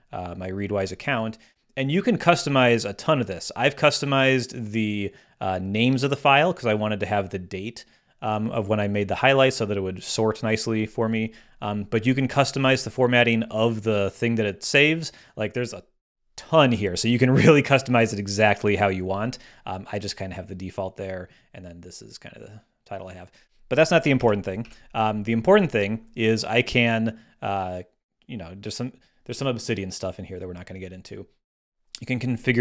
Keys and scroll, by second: 24.1 super+w, 24.6 super+h.